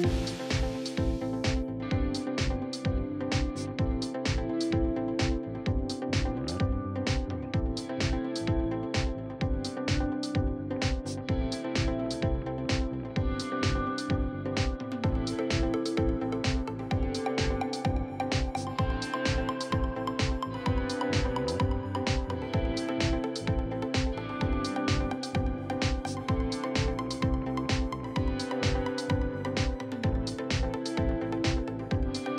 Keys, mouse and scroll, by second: 0.6 right click, 1.4 click, 2.3-3.6 middle drag, 3.6 right click, 4.5-5.6 drag, 6.3 shift+middle click, 6.9 right click, 7.4 middle click, 7.7 right click, 8.5 click, 9.1 middle click, 9.9-10.9 ctrl+right drag, 10.9 shift+middle click, 11.6 right click, 12.0 middle click, 12.6 right click, 13.3 click, 13.9 middle click, 14.5 right click, 15.3 click, 15.9 middle click, 16.1 right click, 16.5 click, 17.1 shift+middle click, 18.0-20.2 right drag, 20.2-21.4 drag, 21.4 right click, 22.1-23.2 drag, 23.4 shift+middle click, 24.2 right click, 24.7 shift+middle click, 25.1-26.1 right drag, 26.1 f, 26.6-27.7 drag, 28.9 shift+middle click, 29.4 right click, 30.1 click, 30.9-31.9 middle drag, 31.9 KP_3.